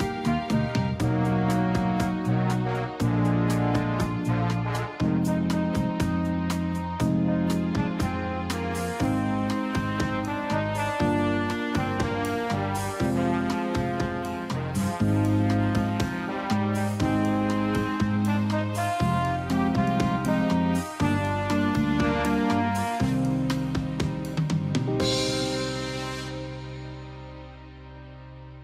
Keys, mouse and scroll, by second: 5.0 i, 5.5 click, 11.5 Right, 14.4 click, 16.1 Left, 18.6 click.